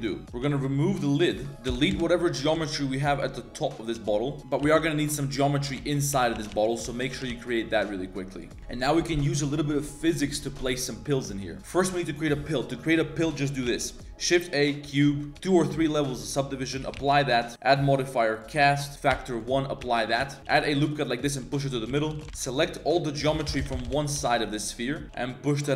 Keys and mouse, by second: 0.0 click, 0.2 g, 1.2 click, 1.4 Tab, 1.5 ctrl+KP_Add, 1.5 a, 1.5 1, 1.9 ctrl+KP_Add, 2.6 shift+click, 3.1 shift+click, 3.6 click, 3.9 x, 4.4 ctrl+z, 4.4 e, 4.4 s, 4.6 s, 5.8 shift+middle click, 6.1 e, 6.3 g, 6.9 shift+middle click, 7.1 g, 10.2 click, 10.9 middle click, 11.3 middle click, 11.6 middle click, 12.0 middle click, 13.8 shift+a, 15.3 ctrl+2, 15.5 ctrl+3, 17.1 ctrl+a, 17.5-18.4 drag, 18.9 click, 19.8 ctrl+a, 20.2 Tab, 20.4 ctrl+z, 20.4 ctrl+r, 20.4 a, 20.5 ctrl+r, 21.9 z, 22.1 3, 22.5 ctrl+shift+click, 22.7 click, 23.2 ctrl+KP_Add, 23.3 ctrl+KP_Add, 23.5 ctrl+KP_Add, 23.6 ctrl+KP_Add, 23.7 ctrl+KP_Add, 23.8 ctrl+KP_Add, 24.2 ctrl+KP_Add, 25.0 g.